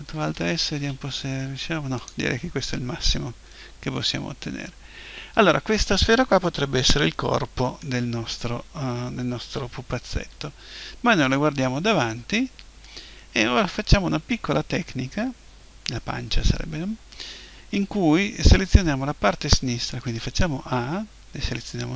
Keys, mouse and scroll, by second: 0.3 alt+shift+s, 2.1-3.5 drag, 3.7 click, 3.9-5.3 middle drag, 6.2 middle click, 10.1 KP_1, 20.1 a.